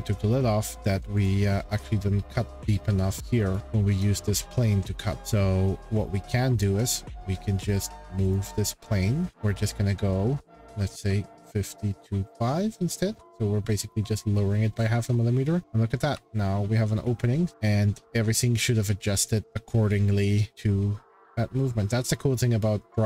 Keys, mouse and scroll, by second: 0.1 click, 1.2 click, 3.2 click, 3.5 click, 4.0 click, 5.0 scroll, 6.8 click, 8.3 click, 8.4 scroll, 8.6 click, 9.3-9.6 scroll, 11.1-12.7 typing, 13.1 Return, 14.7-15.6 scroll, 17.0 shift+middle click, 17.5 click, 19.4 shift+middle click, 19.4-20.2 scroll, 21.0-21.6 scroll.